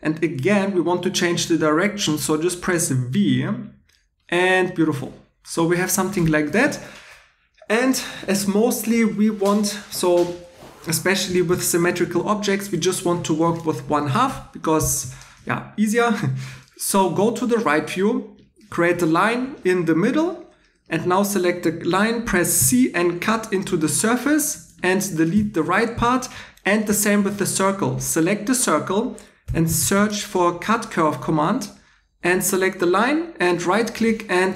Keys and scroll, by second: 3.3 v, 22.6 c, 24.5 Tab, 25.3 x, 27.3 2, 29.2-30.4 typing, 34.0 2.